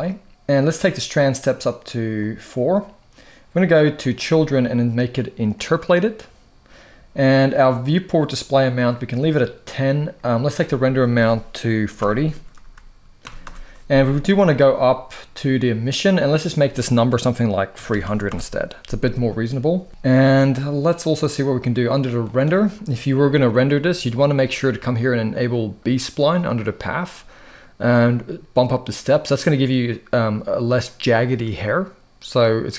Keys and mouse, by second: 2.0 click, 3.7 click, 5.3 click, 10.3-13.2 drag, 16.2-18.0 drag, 17.7 0, 22.0 click, 26.2 click, 28.6 click.